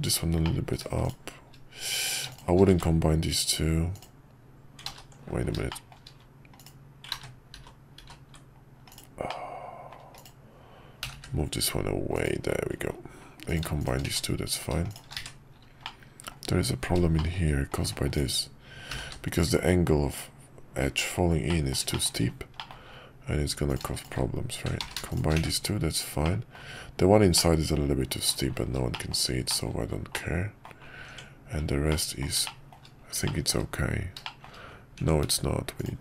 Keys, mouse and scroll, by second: 0.0 click, 0.4 middle click, 3.9 click, 4.9 ctrl+z, 5.7 shift+middle click, 9.2 middle click, 11.0 g, 14.0 1, 15.2 1, 15.8-17.0 middle drag, 17.1 middle click, 18.9 g, 21.6 middle click, 22.0 shift+middle click, 22.7 middle click, 24.9 ctrl+z, 25.4 1, 26.2 middle click, 27.3-28.3 middle drag, 28.3-28.8 scroll down 1, 28.9 shift+middle click, 29.1 shift+scroll down 1, 29.5 middle click, 29.7-30.1 scroll down 1, 30.1 middle click, 31.0 Tab, 31.9-32.2 middle drag, 32.4 shift+middle click, 33.3 middle drag, 34.2 shift+middle drag, 35.0 Tab.